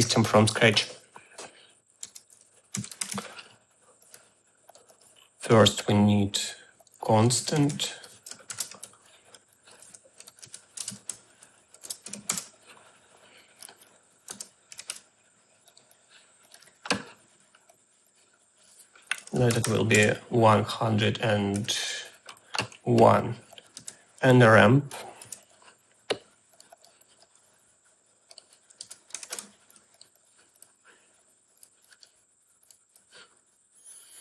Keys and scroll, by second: 2.5-3.6 typing, 7.2-12.1 typing, 12.3 Return, 14.3 Tab, 14.5-15.5 typing, 19.1-20.0 typing, 21.6 1, 23.8 Tab, 24.2 r, 25.3 a, 28.9 Tab, 29.0-29.9 typing.